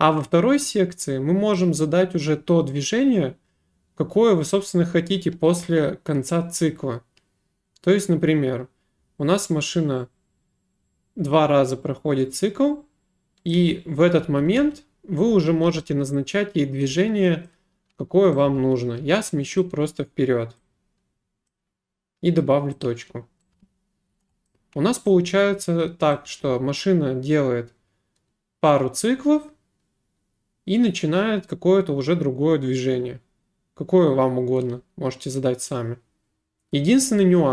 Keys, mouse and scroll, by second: 1.6 click, 13.5 click, 13.6-15.7 typing, 17.5 click, 18.2-19.1 typing, 19.6 right click, 21.3-22.0 typing, 21.5 click, 22.8 click, 23.3-24.1 typing, 24.5 right click, 26.1 click, 26.3 space.